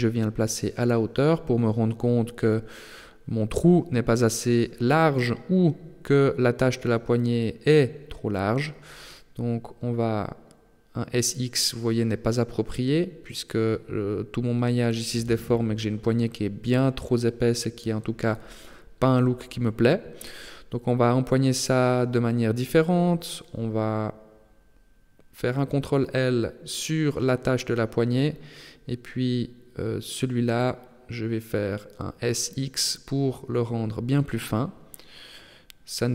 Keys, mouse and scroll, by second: 2.7 Tab, 3.2 middle click, 6.0-6.7 scroll up 3, 7.1 Tab, 9.9 s, 12.1 Tab, 12.7 middle click, 14.3-14.7 scroll down 5, 14.7 middle click, 16.2 KP_7, 17.3 shift+middle click, 18.0 Tab, 18.8 ctrl+z, 19.1 ctrl+z, 20.5 scroll up 3, 21.5 middle click, 22.7 scroll up 2, 23.1 Tab, 23.9 middle click, 24.8 Tab, 25.7 right click, 27.4 ctrl+l, 30.0 click, 30.9 middle click, 32.4 s, 34.9 middle click.